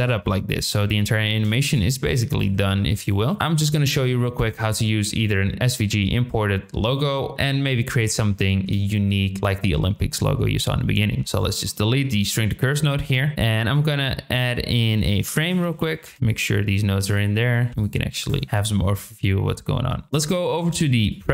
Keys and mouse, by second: 1.2 shift+middle drag, 1.6 click, 2.1 click, 3.0 click, 3.3 g, 11.3 ctrl+click, 11.3 ctrl+right click, 12.1 drag, 13.2 shift+middle click, 13.3 shift+a, 16.1 g, 17.1 click, 17.7 g.